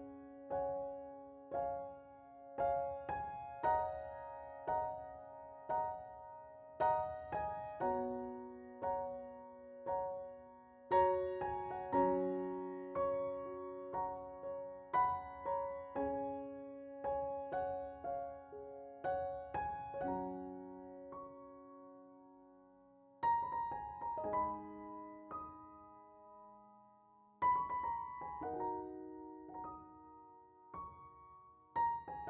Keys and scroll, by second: 2.0 alt+r, 2.7 alt+r, 3.0 Delete, 4.1 alt+e, 4.7 alt+r, 5.0 Delete, 5.8 Delete, 8.5 ctrl+z, 9.3 alt+r, 12.4 Delete, 19.3 alt+q, 22.6 2, 23.4 Return.